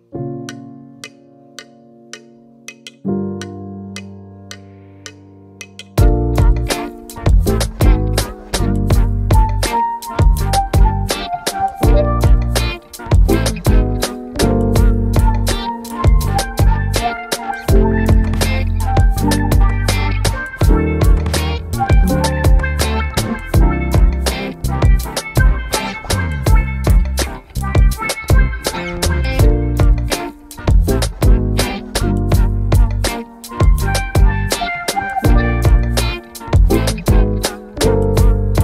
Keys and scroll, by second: 2.3 typing, 2.4 Return, 10.6 typing, 12.1 Return, 26.8-28.8 scroll down 1, 34.7-38.6 scroll down 1.